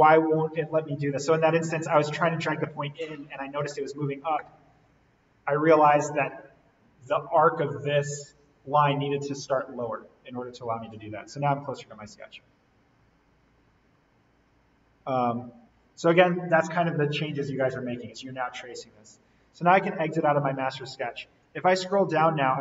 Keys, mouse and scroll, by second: 10.1-11.7 scroll up 1, 11.7-12.4 scroll down 1, 13.9-14.7 scroll up 1, 17.6-19.6 scroll down 1, 19.6-22.6 drag.